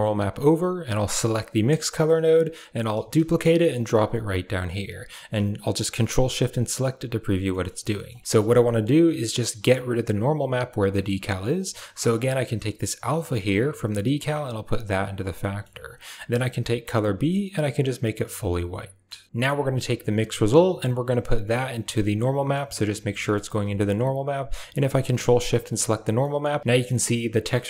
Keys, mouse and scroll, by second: 1.0 right click, 2.8 shift+d, 4.7 click, 4.8 middle click, 5.0 click, 6.3 ctrl+shift+click, 7.4 middle click, 7.9 middle click, 10.7 middle click, 11.5 middle click, 11.9 click, 13.2-15.2 drag, 15.3 middle click, 16.2 click, 18.3-18.9 middle drag, 19.3-20.4 drag, 20.6-22.5 drag, 23.1 middle click, 25.2 ctrl+shift+click, 26.0 middle click, 26.6 shift+middle drag.